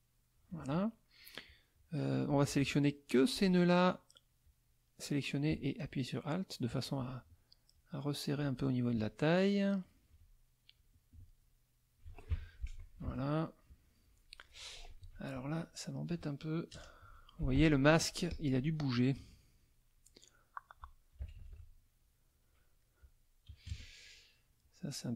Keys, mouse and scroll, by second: 2.3-3.5 drag, 4.4-6.8 drag, 7.7 alt+click, 8.6-10.2 alt+drag, 10.7-12.1 drag, 12.3 alt+F1, 13.0 ctrl+KP_5, 14.2 click, 15.0 F2, 15.3 click, 16.7 KP_Add, 17.0 KP_Subtract, 17.5 F1, 18.3 click, 18.9 click, 20.4 middle click, 21.2 KP_Subtract, 22.3 click, 22.8 click, 23.7 KP_Add, 24.2 click, 24.9 click.